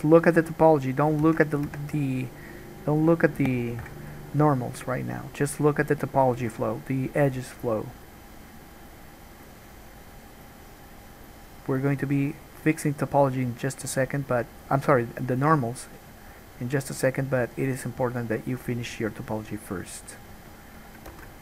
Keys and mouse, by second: 1.4 ctrl+z, 1.9 Tab, 3.3-9.1 drag, 6.6 g, 9.1-14.4 right drag, 13.0-18.4 drag, 18.4-20.4 middle drag, 20.4-21.4 drag, 21.3 ctrl+z.